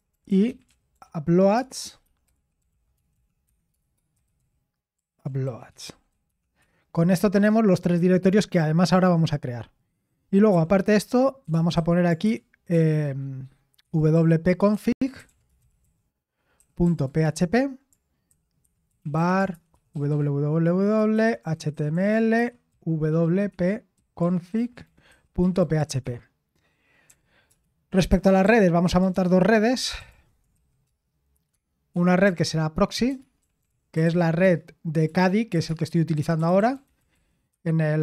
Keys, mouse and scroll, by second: 0.0-6.6 typing, 7.7-8.5 typing, 10.5-12.7 typing, 13.8-27.4 typing, 28.0 Escape, 28.8-38.0 typing.